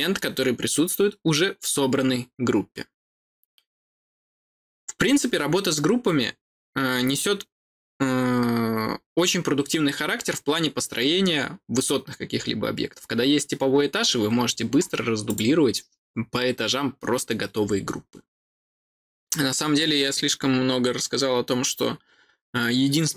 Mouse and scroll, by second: 15.2 click.